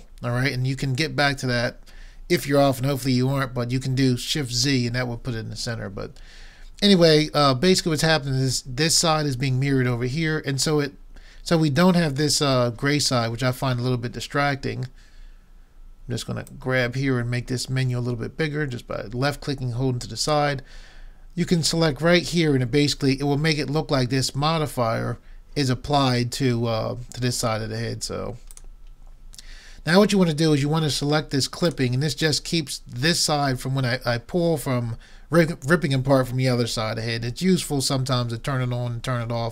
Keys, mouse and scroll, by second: 16.5-18.3 drag, 28.5-30.4 drag, 31.7-33.5 drag.